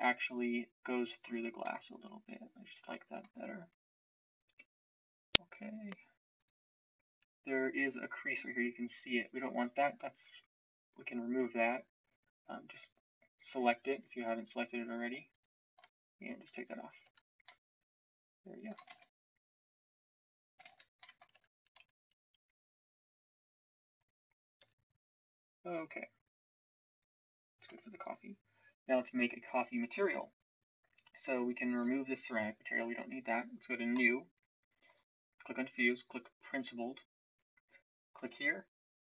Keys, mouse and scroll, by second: 10.0 Tab, 17.0 Tab, 17.4 middle click, 18.9 shift+z, 20.6 shift+z, 21.3 Tab, 24.5 s, 27.5 Tab.